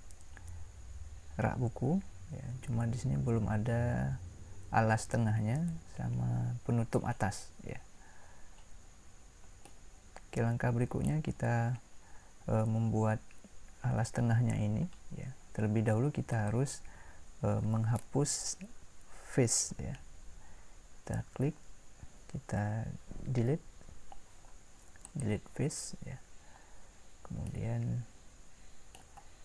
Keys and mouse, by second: 0.3-3.0 middle drag, 9.6-13.0 middle drag, 16.3-23.7 drag, 23.7 Delete, 27.7-29.4 middle drag.